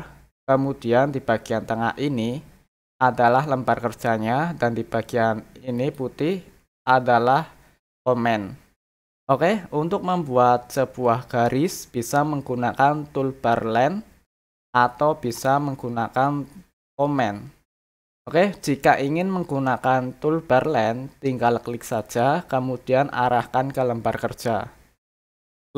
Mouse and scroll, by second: 5.7 click, 15.3 click, 21.9 click, 25.5 click.